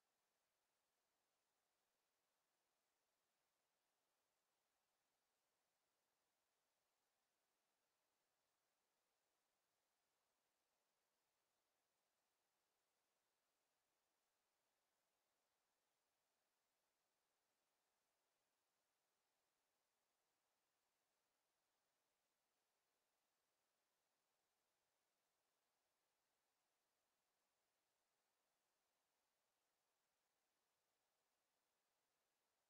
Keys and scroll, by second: 12.0 shift+m, 12.9 shift+-, 15.3-16.7 typing.